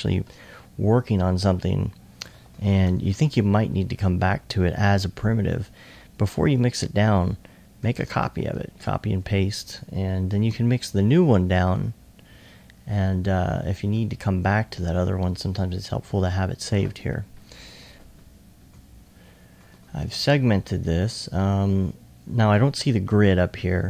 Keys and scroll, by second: 10.5 c, 18.8 c, 20.2 c.